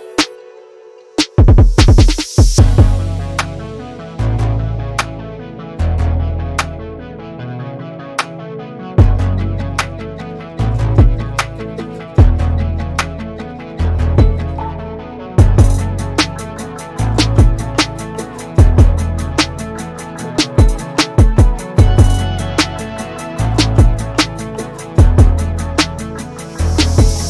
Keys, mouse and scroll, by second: 1.1 click, 1.8 drag, 2.1 scroll down 6, 2.4-3.6 middle drag, 3.6 scroll down 1, 3.9-4.8 middle drag, 4.8 scroll up 2, 5.5 KP_7, 8.2-8.6 scroll down 5, 8.6 click, 9.3 scroll up 1, 9.8 click, 10.7-12.5 middle drag, 13.0 scroll down 1, 13.3 click, 13.8 scroll down 1, 14.0-15.9 middle drag, 16.5-16.8 scroll up 1, 16.8-17.1 scroll down 1, 17.1-18.3 middle drag, 18.3-18.6 scroll up 5, 18.6-20.4 middle drag, 21.1-22.9 middle drag, 23.6-25.5 middle drag, 26.6-27.0 scroll down 2, 27.0 middle click.